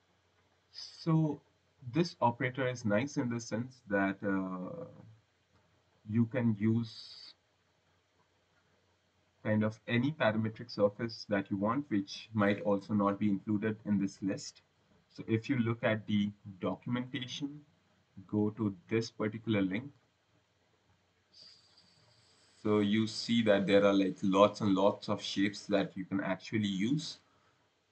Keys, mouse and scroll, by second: 0.4 click, 3.2 click, 3.7-4.2 scroll, 5.8 click, 7.0 click, 8.0 scroll, 9.2 click, 14.5 click.